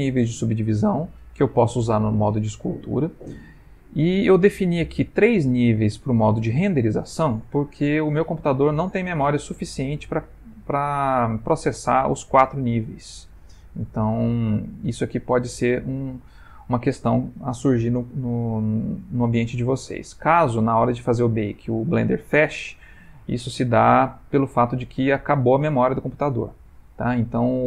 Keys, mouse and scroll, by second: 14.1 middle click.